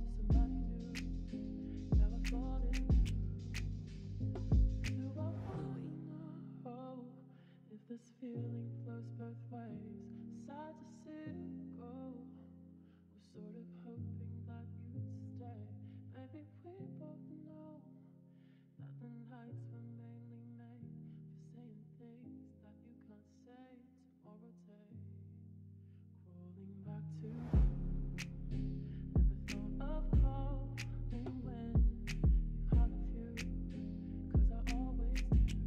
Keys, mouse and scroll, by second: 1.5-1.8 i, 2.1 middle click, 4.5 click, 7.7 e, 12.2 e, 12.9 middle click, 15.0 e, 19.5 e, 22.6 z, 27.4 e, 32.8 middle click, 34.8 click.